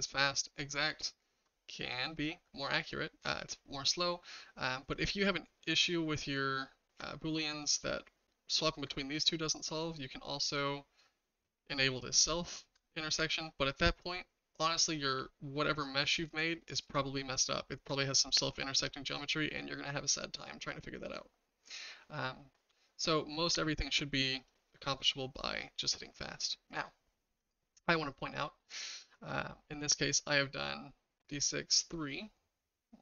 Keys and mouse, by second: 9.6 click, 10.5 click, 16.9 shift+middle click, 16.9 shift+click, 17.0-17.6 shift+middle drag, 19.2 click, 23.5 click, 24.4 click.